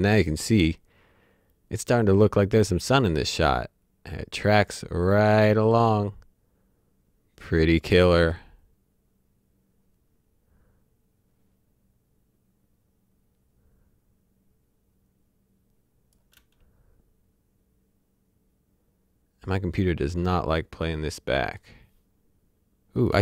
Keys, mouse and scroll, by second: 2.3-16.1 drag, 16.3 space, 21.4 click, 23.1 space.